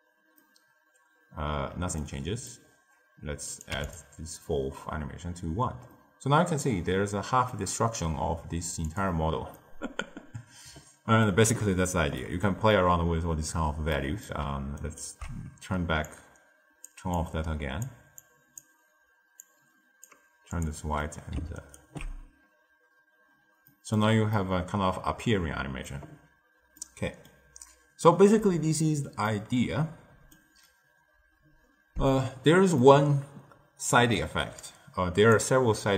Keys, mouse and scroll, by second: 0.3-2.6 middle drag, 2.6-3.2 scroll up 1, 3.2 scroll up 1, 3.4-5.3 drag, 5.8-6.6 middle drag, 6.6-7.0 scroll up 1, 7.0-7.4 scroll down 1, 7.4-8.1 middle drag, 8.1 z, 9.5-14.7 middle drag, 14.7 ctrl+alt+right click, 16.0 click, 17.1-20.6 drag, 20.9-21.5 middle drag, 21.5 ctrl+alt+right click, 23.6-32.1 middle drag, 32.1-32.8 scroll down 2, 32.8-34.5 middle drag, 34.5 click.